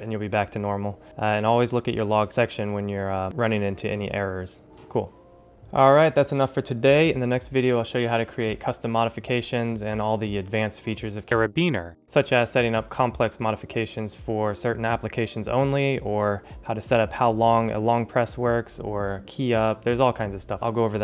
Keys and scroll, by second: 5.5 ctrl+alt+shift+super++.